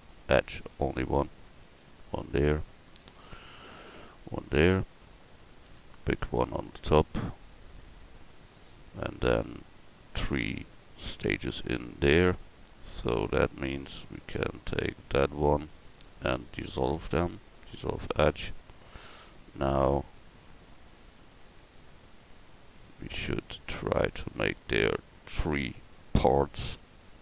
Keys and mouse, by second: 0.0 ctrl+r, 1.3-5.9 drag, 2.5 ctrl+r, 6.0 ctrl+r, 13.8-16.3 drag, 16.3 x, 19.3 ctrl+r.